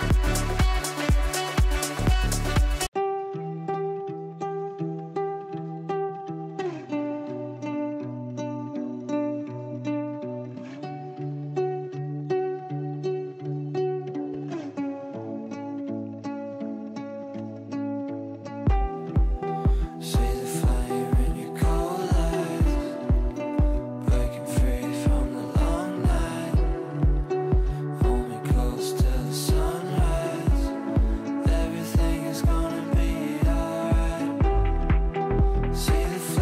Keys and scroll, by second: 0.1 shift+F2, 0.6 shift+Page_Down, 1.1 Escape, 24.1 f, 27.2 shift+F2, 28.4 F9.